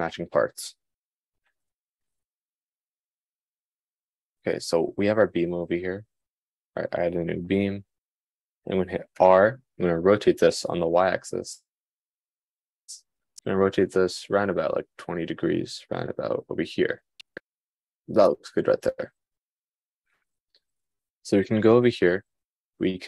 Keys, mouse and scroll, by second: 9.6 r.